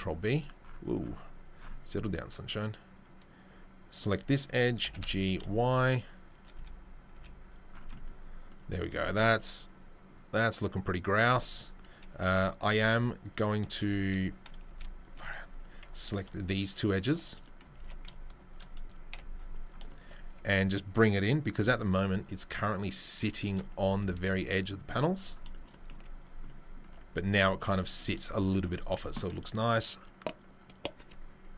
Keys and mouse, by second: 4.0 click, 4.8 g, 6.5 z, 7.1 z, 7.5 click, 7.8 Tab, 11.3 Tab, 12.8 z, 14.0 a, 14.6 z, 15.9 alt+right click, 16.0 alt+middle click, 17.2-31.5 middle drag, 17.8 ctrl+z, 19.1 KP_7, 20.3 1, 21.5 c, 23.8 s, 25.9 z.